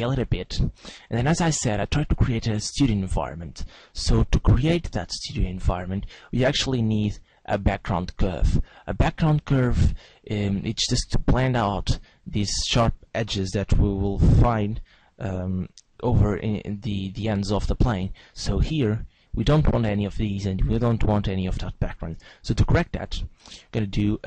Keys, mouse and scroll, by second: 2.2 click, 4.2 s, 5.7 click, 6.8 click, 9.6 click, 22.3 Tab.